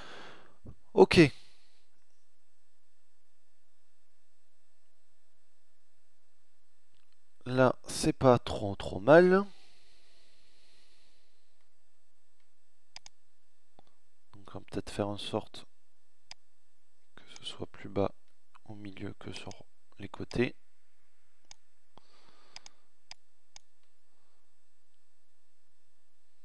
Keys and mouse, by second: 10.6-11.9 middle drag, 13.9 middle click, 19.2 middle click, 20.3 click, 21.5 click, 22.1-23.1 middle drag.